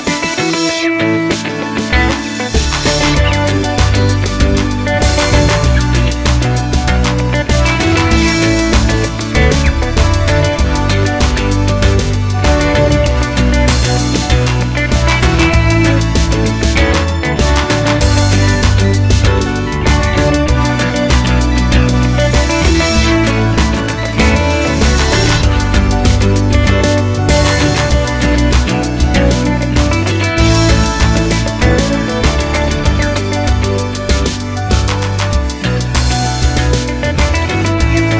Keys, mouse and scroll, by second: 0.8 Tab, 1.4 scroll down 2, 1.5 scroll up 2, 1.7 click, 1.9-3.1 middle drag, 3.1 click, 3.2 middle click, 3.9 click, 4.4 click, 5.4 click, 5.6-6.7 middle drag, 6.3 scroll up 2, 6.7 click, 6.9 KP_Decimal, 7.6 click, 9.4 click, 12.3 click, 15.3-18.9 middle drag, 15.6 scroll down 2, 16.2 scroll down 2, 17.0-17.3 scroll down 2, 17.3 scroll up 2, 17.9 KP_0, 18.9 click, 20.1 z, 27.7 click.